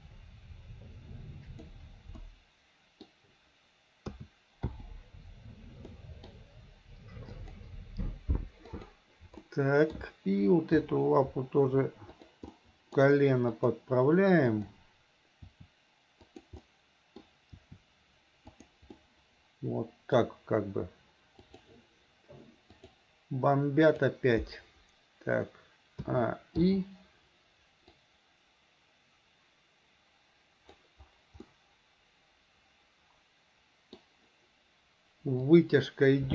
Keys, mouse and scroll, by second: 2.2-3.1 scroll up 1, 3.1 scroll down 1, 4.1 a, 4.7 i, 6.0 middle click, 8.7 click, 9.5-10.0 middle drag, 10.8 r, 12.6 middle click, 13.5 click, 14.5 click, 15.5 r, 16.7 middle click, 17.5 r, 19.0-20.2 middle drag, 26.1 a, 26.6 i, 28.0-30.9 drag, 31.5-34.0 middle drag, 35.5 click.